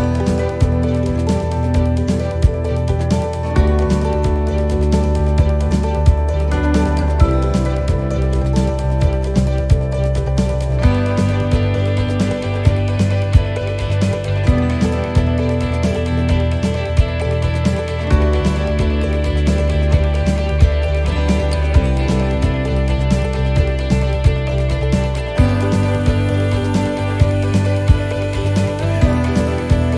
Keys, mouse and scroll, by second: 0.6 middle click, 2.4 c, 9.4 middle click, 10.5 c, 15.5 middle click, 16.2 c, 19.7 middle click, 20.2-20.6 scroll down 2, 20.6 middle click, 21.7 u, 23.2 middle click, 23.9 scroll up 3, 24.4 middle click, 25.3 u, 26.9 middle click, 27.9 shift+middle click, 28.2-28.5 scroll up 1, 28.5 middle click, 29.2 middle click, 29.3 shift+middle click, 29.5-29.9 scroll down 3.